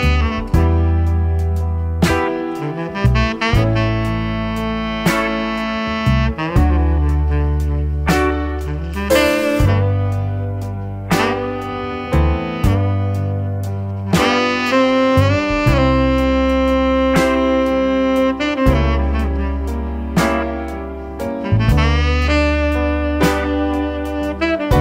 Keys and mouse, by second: 19.4 click, 23.7-24.8 shift+drag.